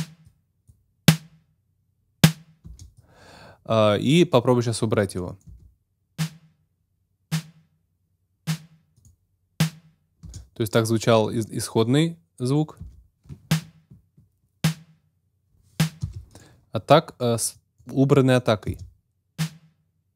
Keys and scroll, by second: 2.6 space, 5.4 space, 10.2 space, 12.7 space, 16.0 space, 18.7 space.